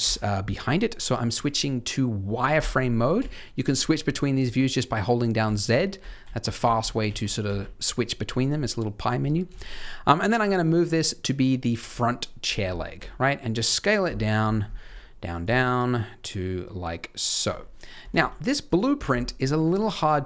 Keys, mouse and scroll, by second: 0.5-2.5 scroll up 2, 2.5 click, 3.1 z, 5.6-7.4 typing, 9.5 shift+middle click, 10.4 g, 11.8-12.4 scroll down 2, 12.4 scroll down 1, 12.9 s, 14.1 shift+middle click, 14.3-14.8 scroll up 3, 14.8 s, 15.4 g, 17.4 s, 17.9 g, 19.0 scroll down 1, 19.2 shift+middle click.